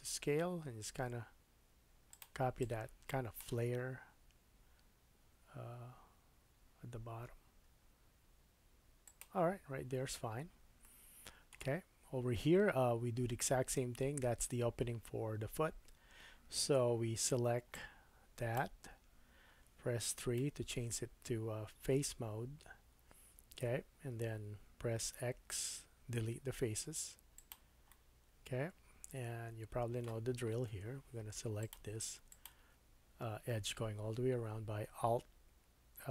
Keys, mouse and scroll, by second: 2.2 middle click, 2.6-9.2 drag, 3.5 s, 9.2-17.7 middle drag, 17.7-31.7 drag, 20.4 3, 25.4 x, 27.9 middle click, 30.7 2, 31.7 middle click, 32.3 alt+click, 32.4-36.1 alt+middle drag.